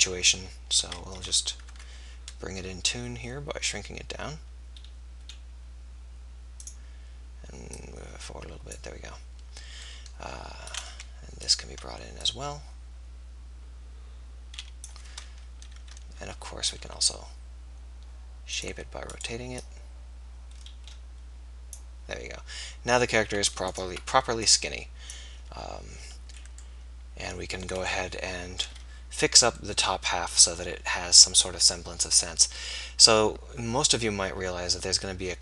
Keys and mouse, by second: 15.5 KP_3, 16.9 r, 19.2-21.8 drag, 23.8 click, 26.1-28.8 drag, 32.3 middle click.